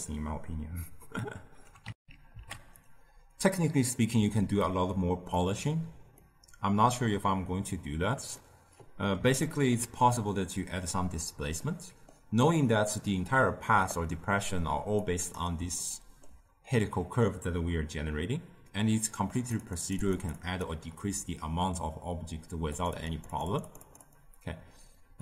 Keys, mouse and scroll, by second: 1.9 ctrl+alt+shift+q, 4.5 click, 6.0 scroll down 1, 6.1-13.8 middle drag, 13.8 click, 14.9 click, 15.7-19.3 ctrl+middle drag, 19.3-25.2 drag.